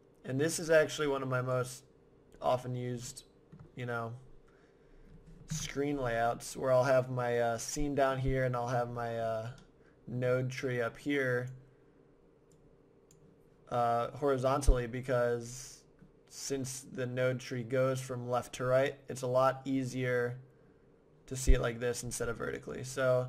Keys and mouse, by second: 0.6-2.3 drag, 3.1-5.0 middle drag, 5.5-6.5 middle drag, 5.5 KP_0, 11.0-14.5 drag, 15.0-19.1 middle drag, 19.2-22.0 middle drag, 22.8-23.2 middle drag.